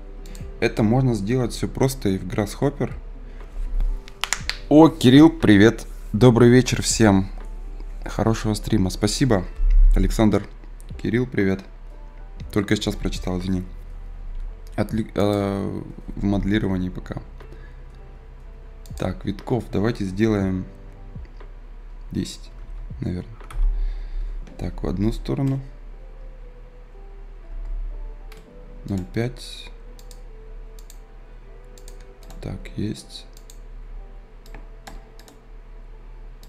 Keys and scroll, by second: 27.5 Return.